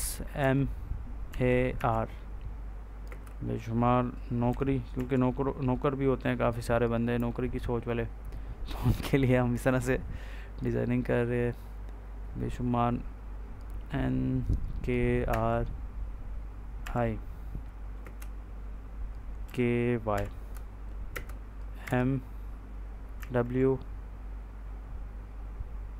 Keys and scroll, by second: 0.3 m, 1.2 a, 1.6 r, 2.9 space, 4.4 n, 4.8 w, 7.0 k, 15.2 r, 16.7 i, 17.9 space, 19.3 k, 20.0 y, 21.0 space, 21.7 m, 23.1 w.